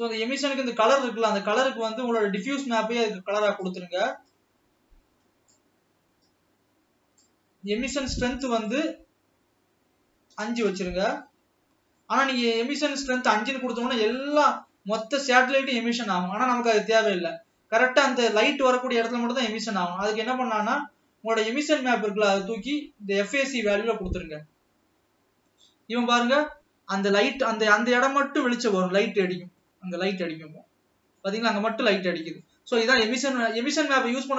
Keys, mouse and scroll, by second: 2.2 drag, 5.5 click, 6.6-10.7 drag, 10.7 KP_Enter, 13.7 scroll down 1, 13.9-18.2 middle drag, 18.2-19.8 scroll up 10, 23.6 click, 26.7-27.6 scroll up 4, 27.6 scroll down 1, 27.7-29.2 middle drag, 29.2-29.9 scroll down 4, 29.9-32.0 middle drag, 32.0-33.3 scroll down 3, 33.3 scroll down 2, 34.2 scroll down 1.